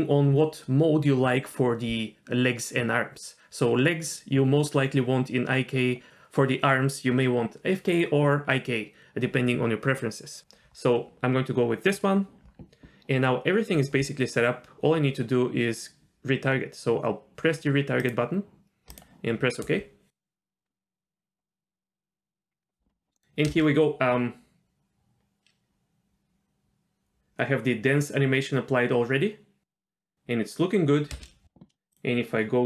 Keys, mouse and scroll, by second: 13.7-14.7 scroll up 4, 18.0-22.5 drag, 23.1 middle click, 23.5 space, 31.1 space.